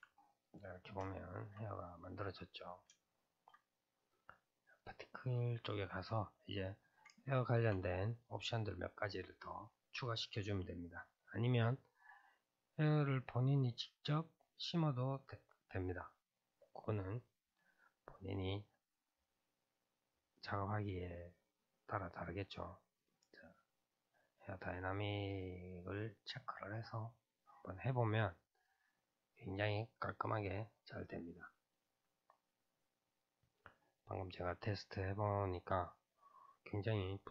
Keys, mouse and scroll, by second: 0.3-1.8 middle drag, 1.8-2.4 scroll up 2, 2.4-4.9 middle drag, 4.9 click, 5.4-8.3 middle drag, 8.3-11.3 drag, 23.5 click, 25.3-27.3 drag, 27.3-28.6 scroll down 3, 28.6-32.3 drag, 32.3 scroll down 3.